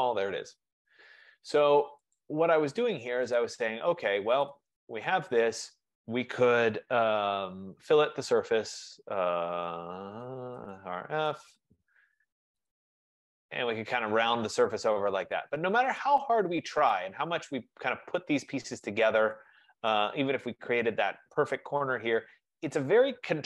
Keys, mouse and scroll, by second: 0.6-2.3 middle drag, 2.3-5.7 drag, 8.0-8.4 typing, 9.8-11.6 typing, 11.3 Return, 12.8 click, 13.4 click, 15.5 right click, 16.1 click, 16.7 click, 19.3 right click, 19.4 click, 20.1 click.